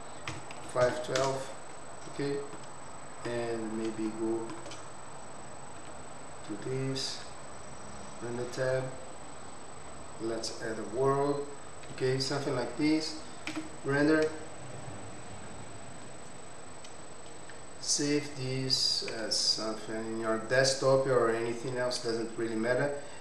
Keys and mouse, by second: 4.0 shift+middle click, 5.7 z, 9.1 click, 9.9-10.6 drag, 11.8 z, 15.6 F12, 22.7 click.